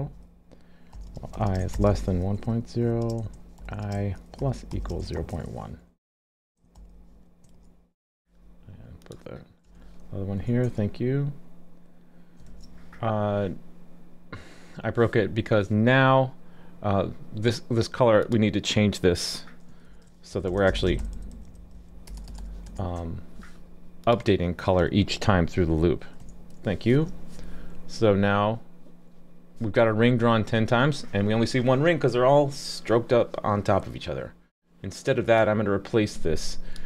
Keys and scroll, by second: 12.5 super+s, 26.9 super+s.